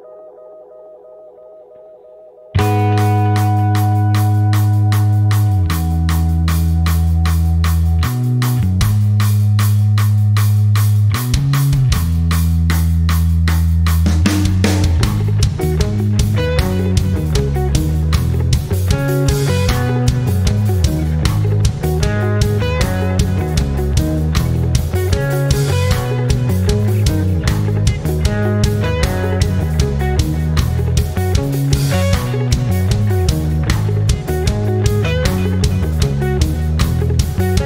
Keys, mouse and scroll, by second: 0.1 ctrl+scroll down 1, 2.4 ctrl+c, 2.7 ctrl+v, 3.2 click, 4.4 ctrl+z, 4.9-9.5 drag, 9.5 ctrl+scroll down 1, 10.0 ctrl+scroll up 1, 11.3 ctrl+scroll up 1, 12.6 click, 13.4 ctrl+scroll down 1, 14.9 ctrl+c, 15.1 ctrl+v, 16.2-21.6 drag, 21.6 ctrl+scroll up 1, 22.4 ctrl+scroll up 1, 23.0-28.5 drag, 28.5 ctrl+scroll down 1, 30.0 click, 31.8-37.6 shift+drag.